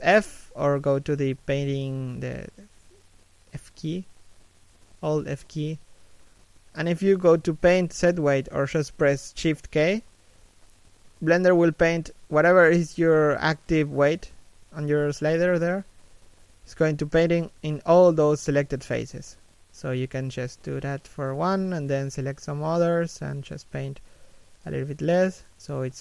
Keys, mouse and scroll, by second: 1.8 middle click, 2.1 f, 2.7 middle click, 3.1 shift+middle click, 3.4 middle click, 9.4 middle click, 12.3 shift+k, 15.2 shift+k, 18.1 shift+k, 19.7 shift+k, 20.7 alt+right click, 21.7 alt+shift+right click, 22.1 f, 23.7 shift+k, 25.1 alt+right click, 25.8 alt+shift+right click.